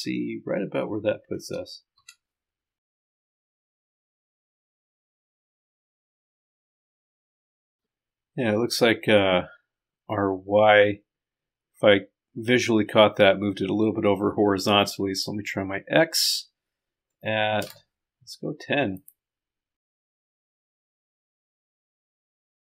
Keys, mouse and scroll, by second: 2.8 click, 2.9 Up, 6.5 click, 7.6 click, 17.6 KP_0, 21.2-22.2 drag, 22.2 middle click, 22.3-22.6 drag.